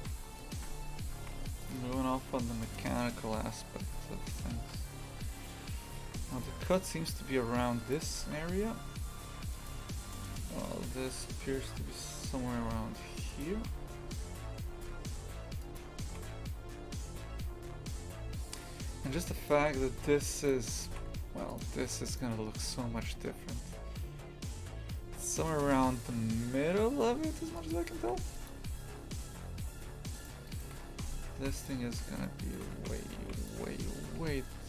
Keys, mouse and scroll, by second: 0.0 shift+f, 0.6 Tab, 1.2 shift+f, 3.9 a, 6.0 ctrl+r, 8.2 shift+f, 9.7 3, 10.3 right click, 10.9 g, 13.6 shift+f, 16.1 shift+f, 19.6 shift+f, 20.9 shift+f, 22.1 right click, 22.6 s, 28.0 shift+f, 29.6 a, 30.1 right click, 30.9 shift+f, 32.2 shift+right click, 32.4 shift+right click, 32.8 shift+f, 33.7 s.